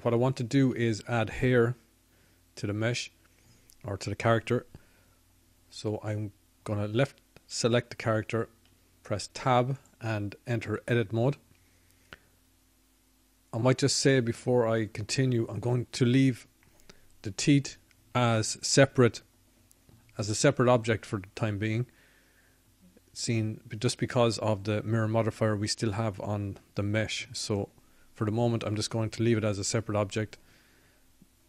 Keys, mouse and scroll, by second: 0.7 middle click, 3.8 KP_1, 14.3 Tab, 15.9 Tab.